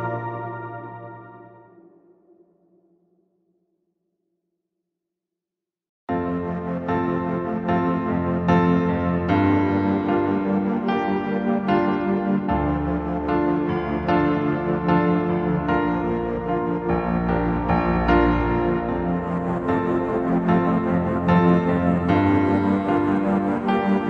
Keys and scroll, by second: 15.7 space, 18.7 space, 19.4 space, 20.1 space.